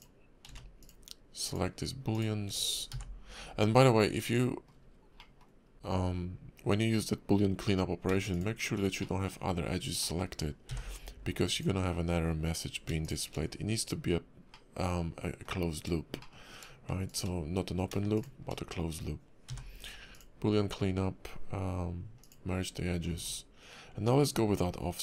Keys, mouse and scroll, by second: 0.5 ctrl+z, 0.8 ctrl+click, 1.5 ctrl+click, 2.1 ctrl+click, 2.9 y, 3.7 middle click, 4.8 scroll up 1, 5.2 middle click, 5.7 y, 8.3 shift+click, 9.0 middle click, 10.0 middle click, 10.7 y, 13.0 shift+click, 14.5 middle click, 16.2 shift+middle click, 17.0 shift+click, 18.1 shift+click, 19.0 scroll down 1, 19.5 y.